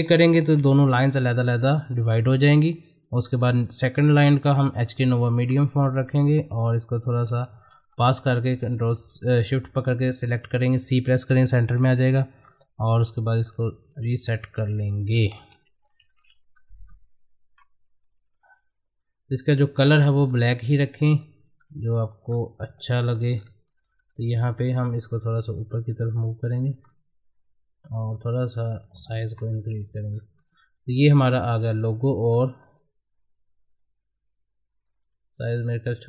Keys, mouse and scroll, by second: 0.4 ctrl+k, 0.8 click, 5.5 scroll up 1, 6.1-7.6 drag, 7.8 shift+c, 9.1-10.8 scroll down 1, 11.8 scroll down 1, 13.0-15.7 drag, 15.7 ctrl+g, 16.1 shift+click, 16.3 c, 16.6 click, 18.0 Up, 19.5 click, 19.9 scroll down 1, 20.8 click, 21.5 middle click, 21.9 ctrl+g, 22.7 scroll up 1, 22.8 shift+click, 23.0 c, 23.3 scroll down 1, 23.7 click, 24.9 Up, 26.8-27.5 scroll up 1, 28.0 shift+click, 29.3 Down, 30.1-30.4 scroll down 1, 30.4 click, 32.3 scroll up 1, 32.7 click, 35.4 Down.